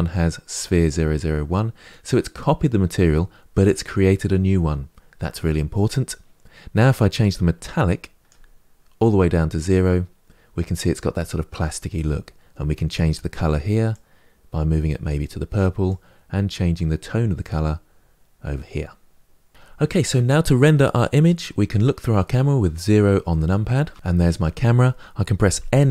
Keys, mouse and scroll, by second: 7.1-13.7 drag, 23.7 KP_0.